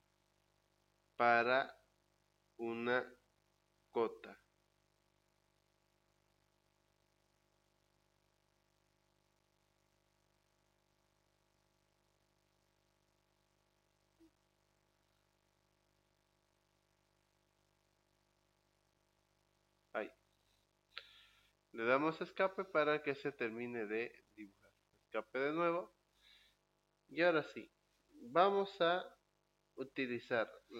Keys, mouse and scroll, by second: 2.1 click, 4.2 click, 18.0 middle click, 19.6 click, 21.9 Escape, 23.0-24.9 middle drag, 24.9 Escape.